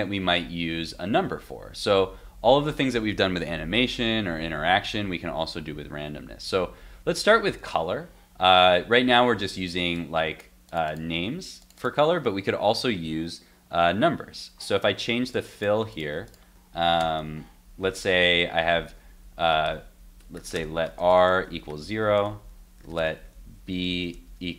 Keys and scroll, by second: 8.6 super+Tab.